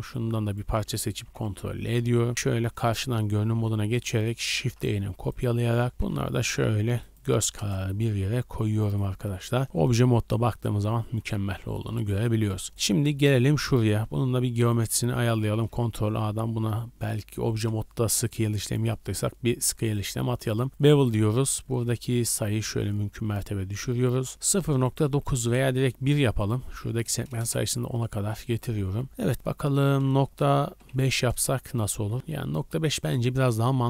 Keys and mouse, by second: 1.2 ctrl+l, 2.2 KP_1, 2.3 KP_1, 2.3 KP_4, 4.4 shift+d, 5.9 g, 7.5 KP_0, 8.1 z, 8.6 shift+click, 9.2 Tab, 9.6 a, 11.2-11.6 drag, 11.6-14.8 middle drag, 13.9 w, 14.8-20.4 shift+drag, 15.6 ctrl+a, 32.5-33.8 middle drag.